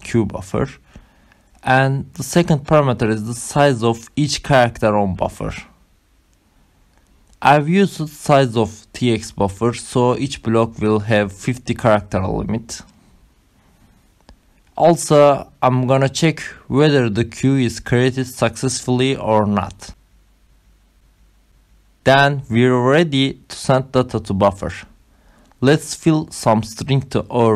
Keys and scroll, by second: 0.6 Return, 1.9 Up, 12.6-15.0 typing, 15.2 Down, 15.6 ctrl+alt+7, 15.9 Return, 16.1-22.9 typing, 20.6 ctrl+alt+?, 21.0 Right, 27.2 Return.